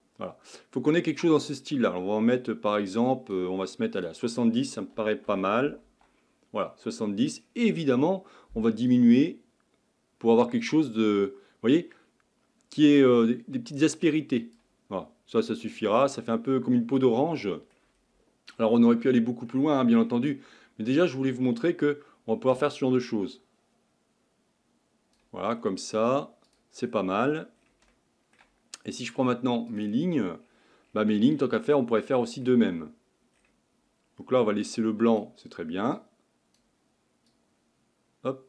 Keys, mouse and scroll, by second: 8.0-8.5 scroll up 5, 8.5-9.1 scroll up 1, 9.1-13.9 drag, 14.9-15.7 scroll up 5, 15.7-16.6 middle drag, 16.6-17.1 scroll down 2, 17.1-18.6 middle drag, 18.6-19.2 scroll down 1, 19.2 scroll down 2, 19.5-20.2 middle drag, 20.2-24.5 scroll up 7, 28.6-29.7 shift+middle drag, 29.7-38.4 drag.